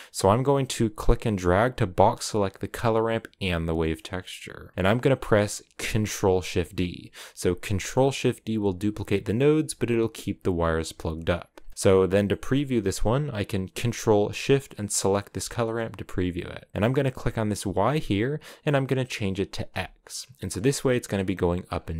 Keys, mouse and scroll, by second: 5.9 ctrl+shift+d, 10.3-15.3 drag, 18.4 ctrl+shift+click, 19.2-20.3 drag, 20.3-21.7 scroll down 1.